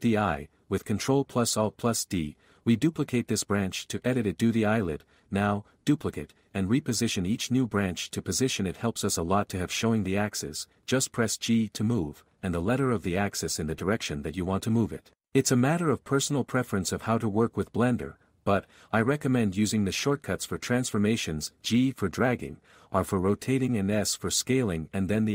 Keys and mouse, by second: 1.2 ctrl+a, 2.3 s, 3.4 Tab, 3.6 alt+z, 3.7 alt+a, 4.5 x, 5.3 ctrl+r, 5.4 click, 6.1 alt+a, 6.8 s, 7.1 click, 7.5 Tab, 7.8 alt+z, 9.0 r, 10.1 ctrl+a, 10.5 r, 12.6 ctrl+a, 13.3 g, 16.5 z, 18.8 x, 20.2 x, 20.9 z, 22.9-25.3 typing.